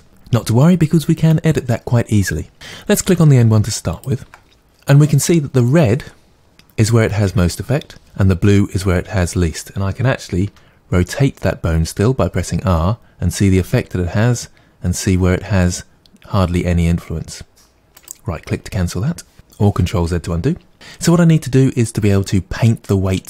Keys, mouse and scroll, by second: 3.9-6.9 ctrl+drag, 10.4 r, 18.1 right click.